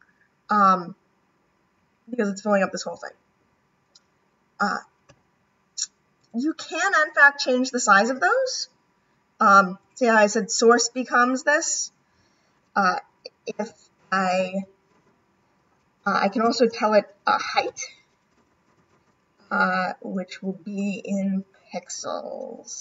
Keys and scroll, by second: 18.6 =.